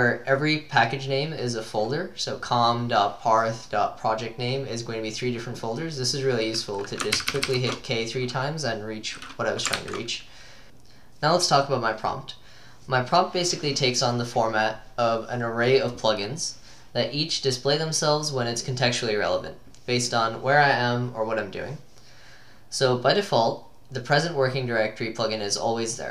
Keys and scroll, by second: 7.2 ctrl+k, 7.3 ctrl+k, 7.5 ctrl+k, 9.8 ctrl+h, 10.6 BackSpace.